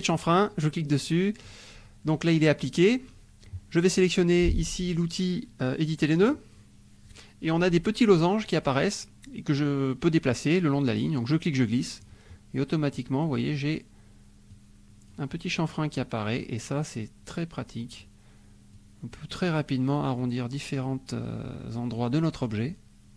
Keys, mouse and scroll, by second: 0.2 click, 1.0 middle click, 6.2 click, 11.3 click, 12.9 click, 14.5 click, 15.9 click, 17.3 click, 18.7 click, 20.1-22.1 drag, 22.7-23.1 drag.